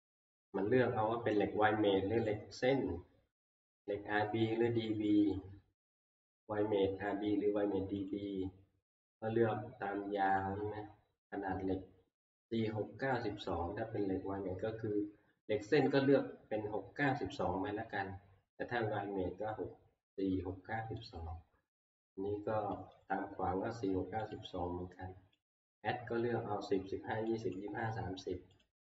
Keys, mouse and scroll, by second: 0.5 scroll, 2.3 click, 3.1 middle click, 8.1 click, 10.4 click, 21.1 click, 22.9 click, 24.3 click, 25.5 click, 27.6 click, 28.6 click.